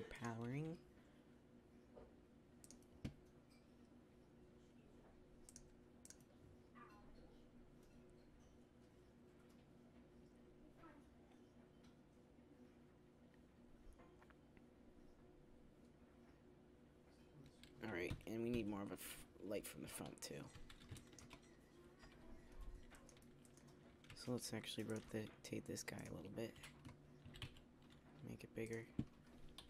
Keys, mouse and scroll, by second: 18.0 Escape, 19.4 KP_1, 20.5 z, 21.9 KP_3, 24.0 r, 24.8-25.2 drag, 25.2 KP_7, 27.1 s, 29.4 KP_3.